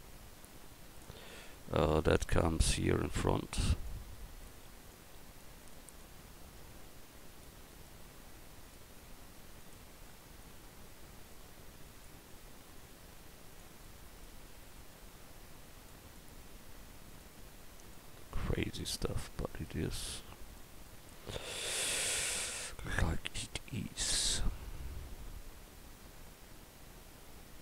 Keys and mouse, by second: 0.5-1.3 drag, 9.1 s, 11.3 click, 17.3-19.1 middle drag.